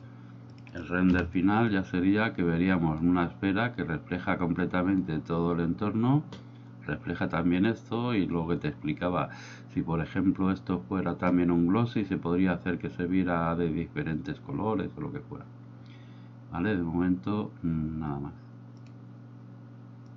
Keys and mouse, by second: 0.5 click, 1.4 F12.